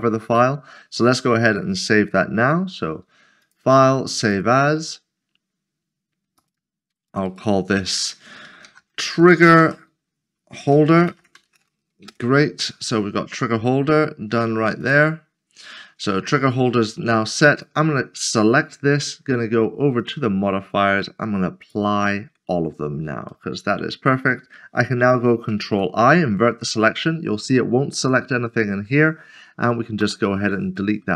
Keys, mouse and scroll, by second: 3.4 click, 6.4 click, 6.6 double click, 8.4-9.4 typing, 10.8-11.5 typing, 12.1 Return, 14.8 click, 16.3 middle click, 19.1 click, 20.0 click, 23.3 middle click, 25.7 ctrl+i, 30.0 Delete, 30.8 middle click.